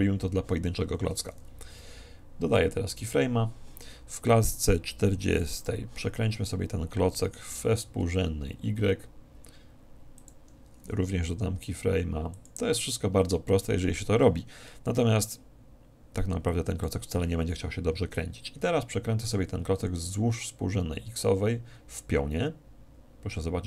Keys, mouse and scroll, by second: 2.9 i, 5.4-7.1 drag, 7.3 r, 10.4-12.0 drag, 11.6 i, 16.5-18.3 drag, 19.3 r.